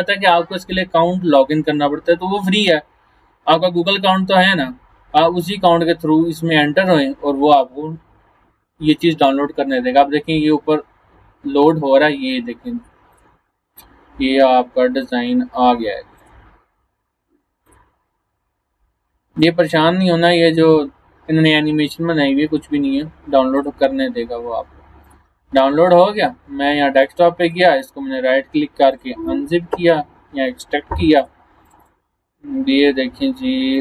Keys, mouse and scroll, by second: 5.6 scroll down 1, 6.1 scroll up 1, 13.2 click, 23.6 click, 27.7 right click, 28.9 click, 31.2 click.